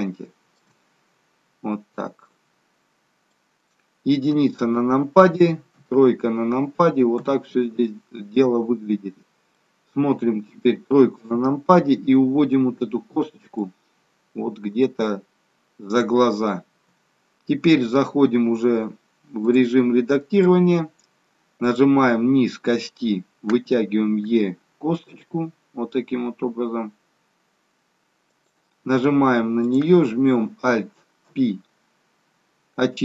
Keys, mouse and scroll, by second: 1.2-1.8 scroll down 1, 2.2 middle click, 4.3 KP_1, 5.7 KP_3, 7.2 KP_1, 9.6 middle click, 11.1 KP_3, 13.5 click, 19.5 click, 21.6 click, 24.2 e, 29.6 click, 31.2 alt+p.